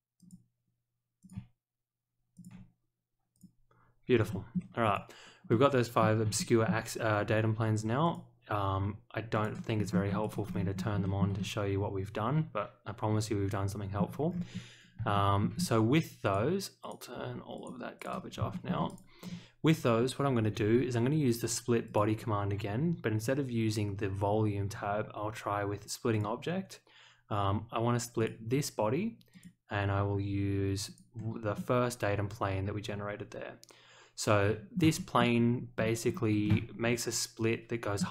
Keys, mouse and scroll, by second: 0.1 click, 1.2 click, 2.3 ctrl+click, 3.3 click, 4.3 shift+middle click, 4.8 click, 5.5 middle click, 6.3 shift+middle drag, 8.0 click, 9.3 click, 9.7-10.9 scroll up 4, 10.2 click, 11.0 shift+middle click, 11.3-13.9 middle drag, 14.2-14.9 scroll down 2, 15.1 shift+middle drag, 15.5 scroll up 1, 16.2 click, 16.8 click, 17.5 click, 17.9 click, 18.2 scroll up 1, 18.5 shift+middle click, 18.8 click, 19.2-19.7 scroll down 1, 21.8 click, 26.1 click, 28.1 click, 29.3 click, 30.8 click, 31.5-34.7 middle drag, 34.9 shift+middle click, 35.7-36.2 scroll down 2, 36.4-37.9 shift+middle drag.